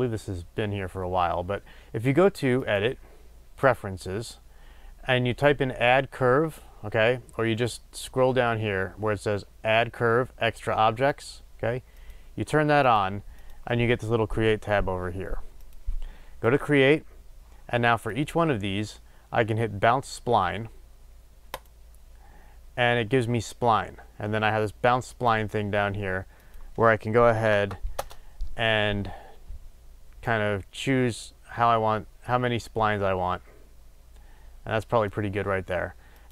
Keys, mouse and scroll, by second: 3.8-18.0 drag, 21.7-23.9 drag, 25.2-27.6 drag, 27.9 click, 28.0 Return, 30.3-36.3 drag.